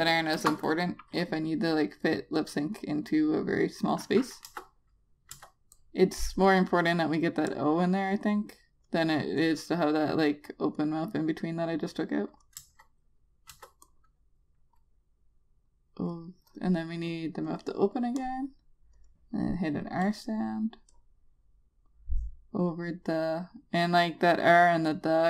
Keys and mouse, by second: 1.1 shift+F6, 1.9 click, 6.1 Return, 6.5 click, 13.4 Return, 14.3 Return, 14.7 click.